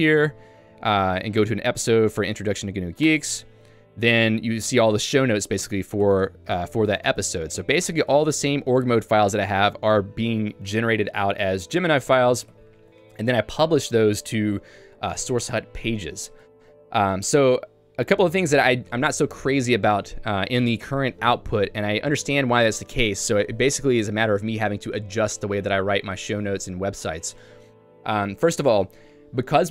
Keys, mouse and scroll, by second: 0.7 j, 2.4 l, 3.1 Return, 4.2 j, 5.2 ctrl+d, 5.7-8.9 ctrl+d, 9.3 ctrl+u, 9.6-12.8 ctrl+u, 28.3 j.